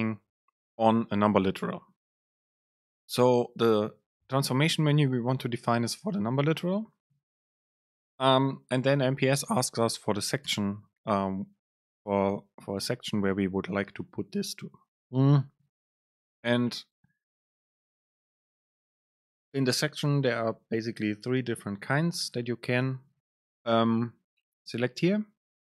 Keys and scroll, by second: 7.5 super+space, 16.3 super+space.